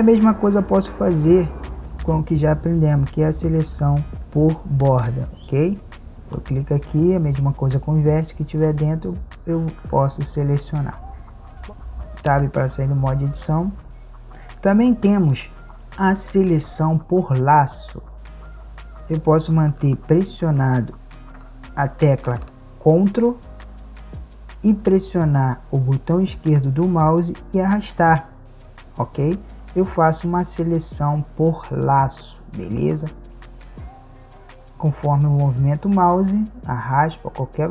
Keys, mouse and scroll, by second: 11.2 a, 12.8 Tab, 18.1 KP_5, 26.4-28.5 drag, 33.2-34.7 drag.